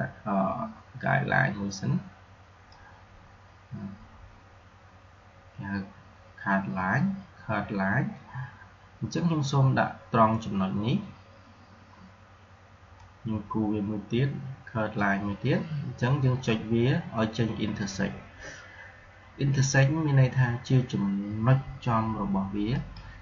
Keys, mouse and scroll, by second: 12.9-17.4 drag, 22.6 click.